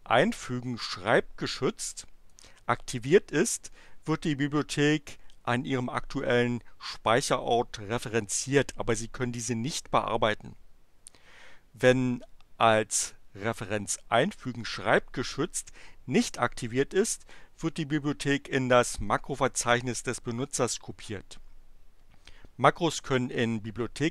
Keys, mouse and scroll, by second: 2.2 click, 14.3 click.